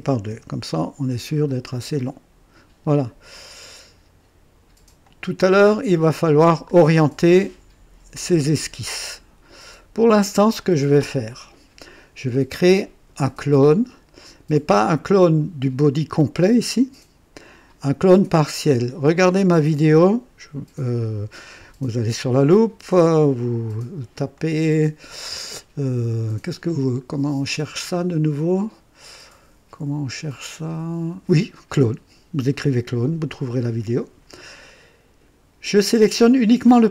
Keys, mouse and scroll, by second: 0.0-0.5 typing, 1.9 click, 5.0 click, 6.6-7.5 drag, 8.7-10.5 drag, 9.9-10.7 typing, 14.7 click, 24.3-25.3 drag, 35.8 click.